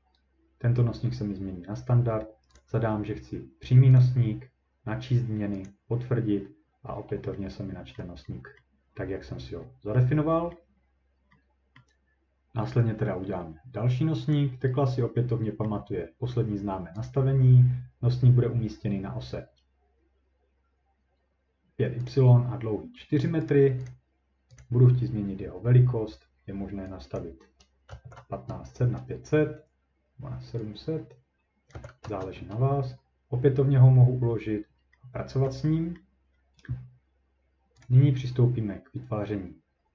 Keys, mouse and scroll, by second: 2.6 click, 4.0 click, 5.7 click, 6.3-7.5 scroll, 7.9-8.3 scroll up 3, 8.6 middle click, 9.6-10.2 ctrl+scroll up 2, 10.2-10.8 scroll down 3, 10.8 scroll, 11.8 scroll, 14.3 click, 15.6-16.8 scroll, 17.1 click, 22.1 click, 23.5 right click, 23.9 click, 24.6 click, 27.2 click, 27.6-28.5 typing, 28.8 Return, 31.7 click, 32.0 Return, 32.5 scroll, 35.5-36.0 ctrl+scroll, 36.3 scroll down 2, 36.4-37.1 scroll down 1, 37.2-37.8 ctrl+scroll down 1, 37.8 click.